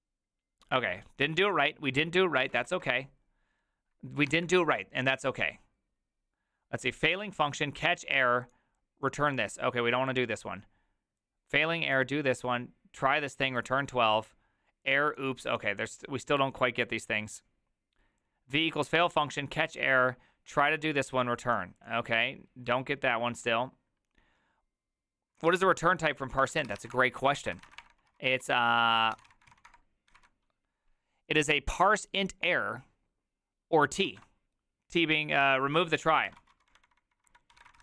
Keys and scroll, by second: 2.7 ctrl+a, 25.5 alt+{, 26.3-30.1 typing, 35.4 alt+{, 36.2 alt++, 36.2 ctrl+c, 36.4-37.8 typing.